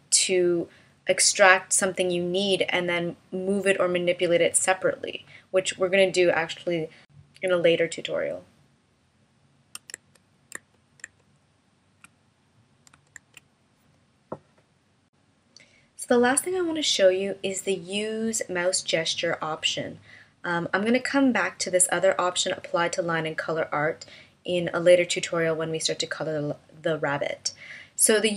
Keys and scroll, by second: 10.5 super+z, 11.1 super+z, 13.7 super+z.